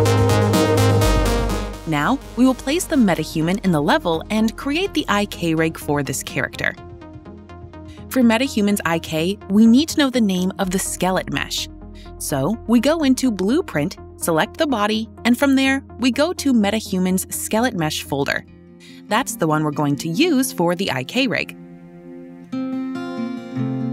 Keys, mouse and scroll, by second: 0.3 click, 3.9 click, 4.1-5.9 typing, 5.6 click, 7.2 q, 7.9 e, 9.1-11.7 right drag, 11.7-13.3 drag, 14.9 click, 16.3 scroll, 17.1-18.9 scroll, 18.9 click, 19.9 click, 21.3 click.